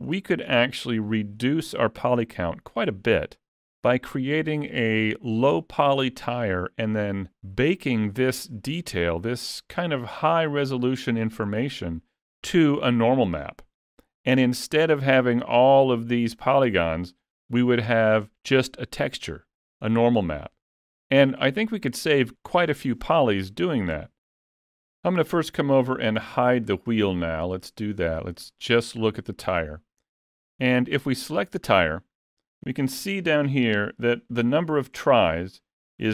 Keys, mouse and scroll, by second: 1.0 Tab, 8.1 middle click, 9.9 middle click, 21.5 middle click, 27.5 click, 28.3 middle click, 31.2 click.